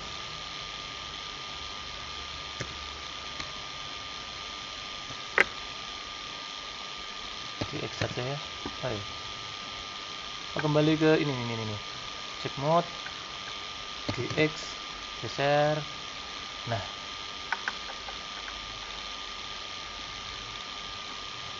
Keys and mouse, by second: 2.5 a, 3.6-6.3 drag, 7.5 g, 7.9 x, 9.7 click, 10.7 click, 14.0 g, 18.9 middle click, 20.0 middle click.